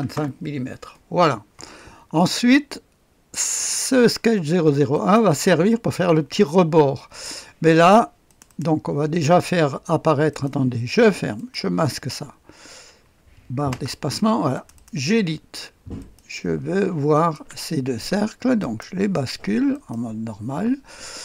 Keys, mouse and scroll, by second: 0.1 Return, 4.9 click, 8.2 click, 10.3 click, 11.3 click, 14.5 click, 15.9 click, 17.1 ctrl+click, 18.6 click, 19.7 middle click, 19.9 click.